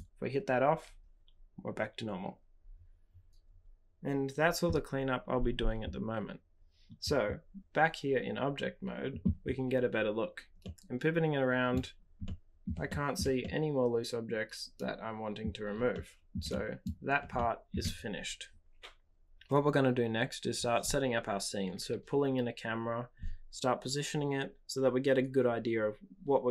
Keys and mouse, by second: 10.7-11.7 middle drag, 12.2-12.6 middle drag, 12.8-13.1 shift+middle drag, 13.4-15.3 middle drag, 15.9-16.3 shift+middle drag, 16.4-16.8 middle drag, 17.3-17.7 shift+middle drag.